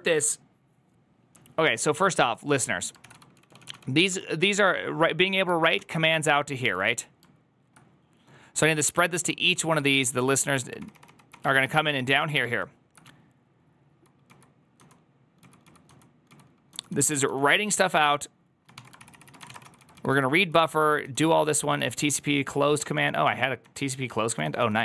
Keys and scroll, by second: 3.5 ctrl+c, 3.5-4.0 typing, 5.6 ctrl+d, 5.8-6.6 typing, 9.0 typing, 9.8 ctrl+d, 10.7 ctrl+d, 10.9 ctrl+d, 12.2 ctrl+d, 12.9 ctrl+d, 12.9-17.4 typing, 18.6-24.6 typing.